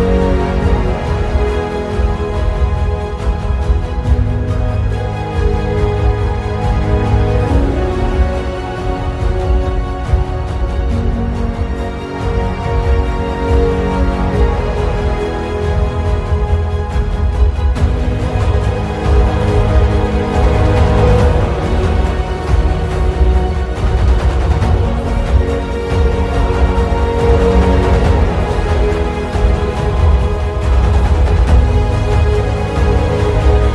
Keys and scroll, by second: 3.7 ctrl+t, 10.4 Return.